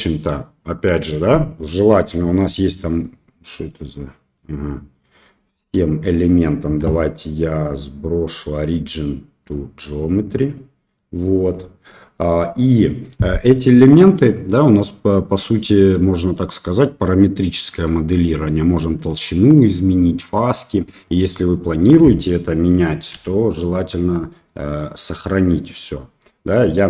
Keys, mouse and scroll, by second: 0.7 drag, 1.3 middle click, 2.4 click, 2.9 click, 4.0-4.3 middle drag, 5.6 drag, 6.1 middle click, 6.8 w, 10.4-10.9 middle drag, 11.3 click, 11.8 middle drag, 13.8 click, 14.6 click, 15.2 click, 20.9 click, 21.3 middle click, 23.1 ctrl+s.